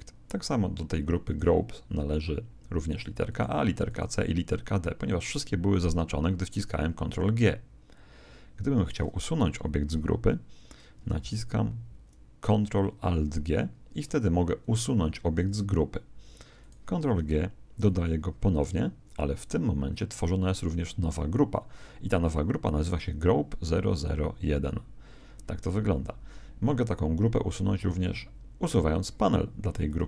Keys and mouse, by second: 1.2-5.7 right drag, 11.9 ctrl+alt+g, 16.6 right click, 18.3 ctrl+g, 29.8 click.